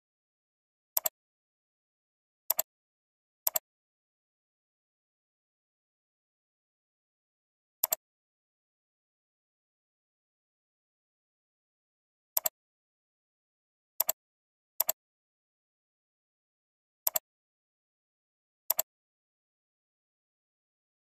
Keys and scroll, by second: 6.2 ctrl+j.